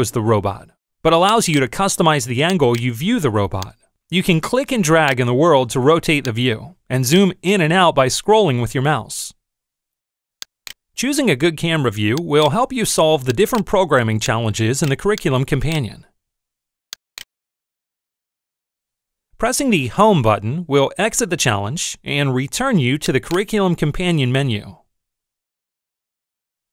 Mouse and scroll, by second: 1.3 click, 2.6 click, 3.5-5.3 drag, 6.1-7.3 drag, 7.3 click, 12.3 click, 13.5 click, 14.1-14.8 drag, 15.0 click, 15.9-16.3 middle drag, 17.0 click, 23.0 click.